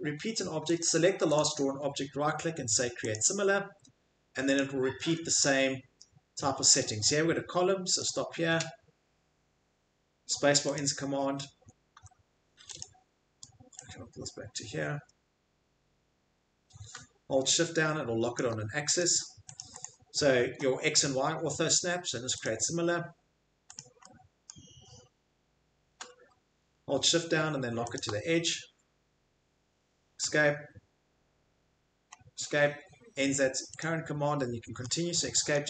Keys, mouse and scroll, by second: 1.3 right click, 5.7 scroll, 6.4-7.0 scroll, 8.0 click, 8.0 scroll, 10.8 click, 11.5-12.0 scroll, 11.6 Escape, 12.0 Escape, 18.3 shift+click, 19.6 click, 19.8 click, 22.4 click, 23.7 click, 24.5 middle click, 27.9 shift+click, 30.3 Escape, 32.2-32.5 middle click, 33.8 click, 34.5 middle click, 34.8 scroll, 35.5 scroll.